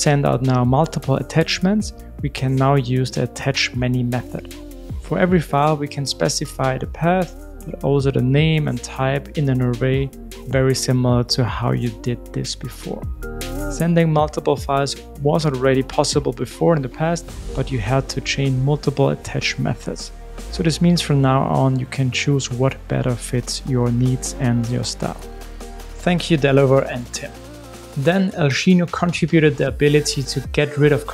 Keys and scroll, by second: 2.6 alt+Up, 4.4 alt+super+l, 9.6 super+c, 11.1 super+v, 16.6 super+v.